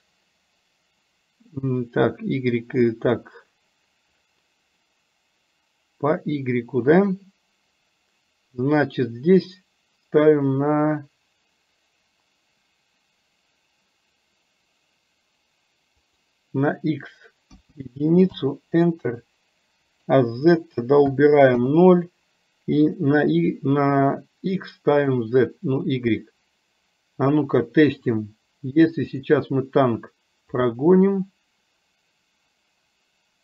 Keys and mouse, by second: 16.2-18.4 drag, 19.9-21.7 drag, 23.4-25.3 drag, 29.2 click, 30.8-33.4 drag.